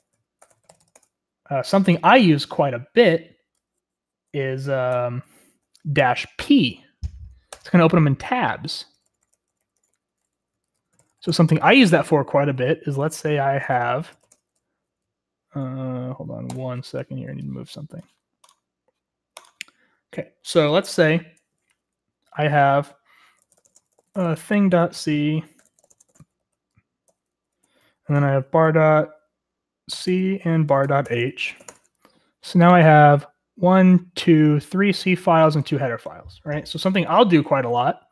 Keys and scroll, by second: 0.0-1.3 typing, 4.9 Up, 5.5 BackSpace, 6.4 p, 7.5 Return, 8.4-11.6 typing, 13.0 ctrl+;, 13.6-14.8 typing, 13.9 ctrl+l, 23.1-28.1 typing, 29.7-32.0 typing, 38.0-38.1 typing.